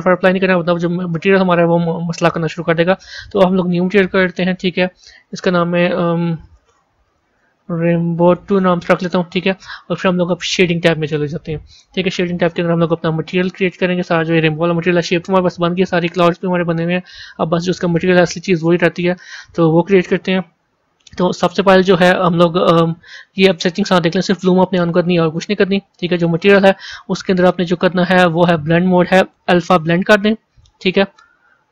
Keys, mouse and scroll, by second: 0.3 click, 1.6 click, 2.8 click, 3.7-4.4 drag, 5.1 click, 5.2-8.3 drag, 11.1 click, 11.9-12.6 scroll down 2, 12.6-22.7 middle drag.